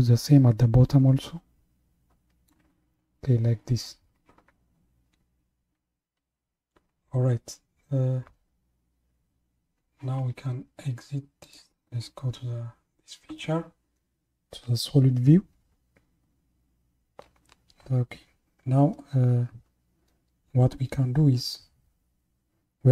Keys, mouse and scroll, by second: 11.4 click.